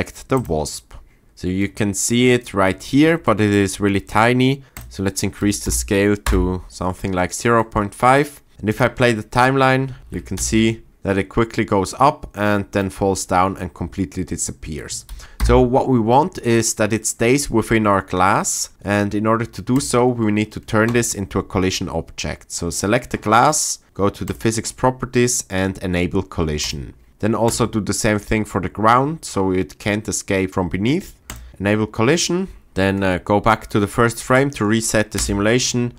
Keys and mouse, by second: 4.7-6.2 drag, 8.7 click, 10.0 shift+Left, 10.0 space, 10.4 space, 10.9 space, 15.4 shift+Left, 24.2 click, 31.3 click, 32.7 shift+Left, 35.2 space.